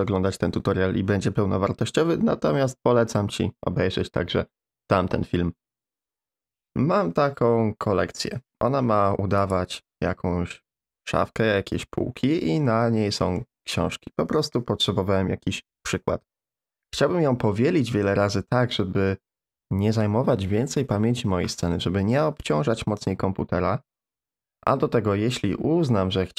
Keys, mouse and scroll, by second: 9.4 click, 12.6-13.2 middle drag, 13.4-13.7 middle drag.